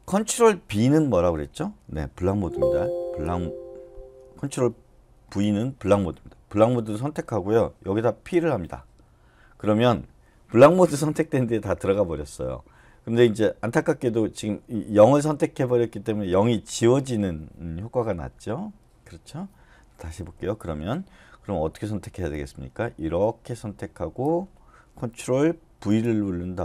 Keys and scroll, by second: 3.0 ctrl+b, 5.1 ctrl+v, 8.3 p, 20.2 u, 25.7 ctrl+v.